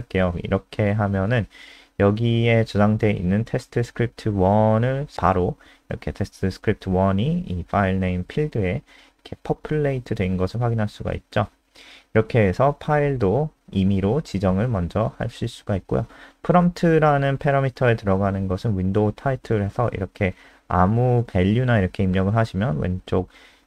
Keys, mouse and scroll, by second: 0.0-0.7 typing, 2.4 click, 2.6 ctrl+s, 3.0 F5, 6.6 click, 17.3 ', 19.3-22.7 typing, 23.0 F5.